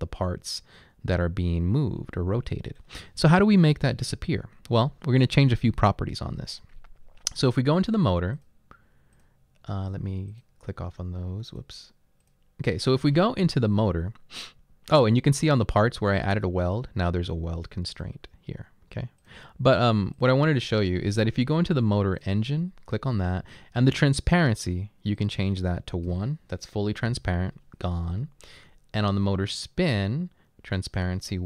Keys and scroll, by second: 0.0-3.0 typing, 4.1-4.7 typing, 5.8 typing, 26.1 1, 27.1 Return.